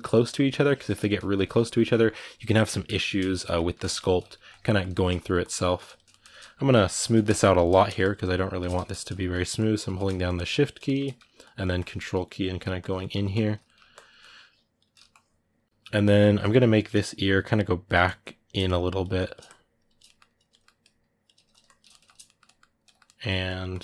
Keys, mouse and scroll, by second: 0.8 ctrl+click, 1.3-3.7 ctrl+middle drag, 3.7-5.9 ctrl+drag, 5.9 ctrl+middle click, 6.3-7.5 shift+drag, 7.5 ctrl+middle click, 7.8-9.7 shift+drag, 9.7 ctrl+middle click, 10.0 shift+click, 10.6 shift+middle click, 11.2-12.7 ctrl+drag, 12.7 middle click, 13.1 ctrl+click, 13.4 middle click, 13.7-15.6 ctrl+drag, 15.6 ctrl+middle click, 16.6-19.8 drag, 19.8 middle click, 20.6-21.7 drag, 21.7-23.2 ctrl+middle drag, 23.2 ctrl+click.